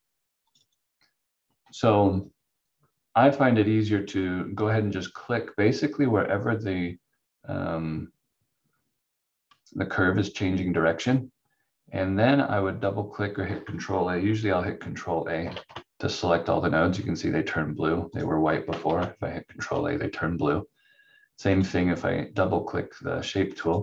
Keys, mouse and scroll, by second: 15.5 ctrl+a, 18.1 click, 18.8 ctrl+a, 21.5 click.